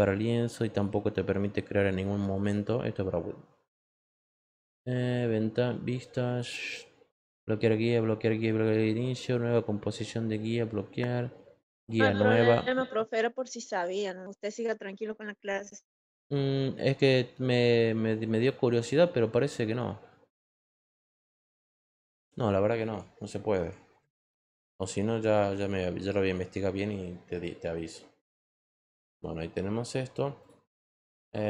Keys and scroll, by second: 23.9 ctrl+z.